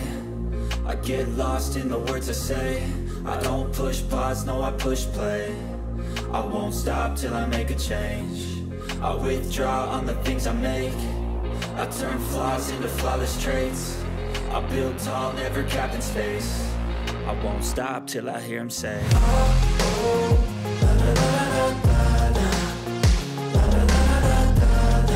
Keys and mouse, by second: 2.7 ctrl+z, 6.0-7.0 drag, 7.9 click, 8.5-16.4 drag, 18.6-24.1 drag.